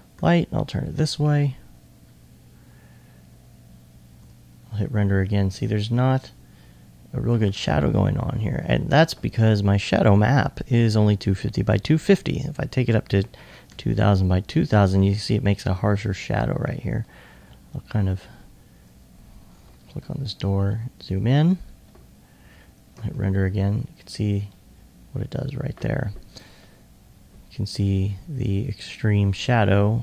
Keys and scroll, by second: 0.2 r, 15.9-17.5 typing, 18.5-19.3 typing, 20.8-21.8 typing, 27.5 r, 29.4 e.